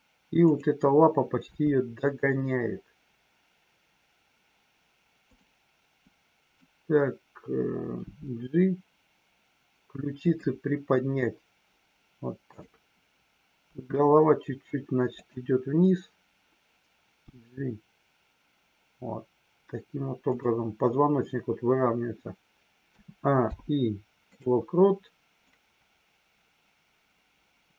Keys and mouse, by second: 1.3 g, 6.1-6.5 drag, 10.2 click, 12.4-13.1 drag, 13.8 r, 23.4 i, 25.5-27.7 drag.